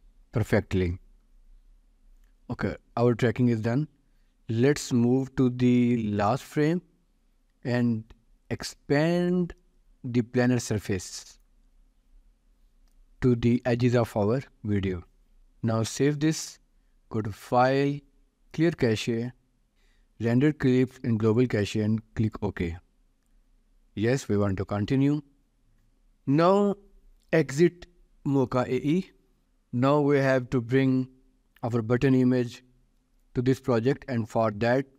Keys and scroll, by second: 0.2 ctrl+s, 15.4 ctrl+s, 29.4 ctrl+s.